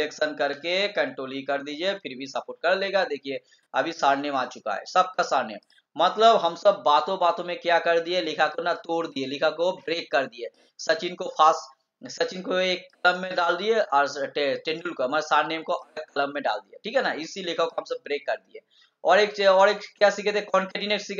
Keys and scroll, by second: 1.7 ctrl+e.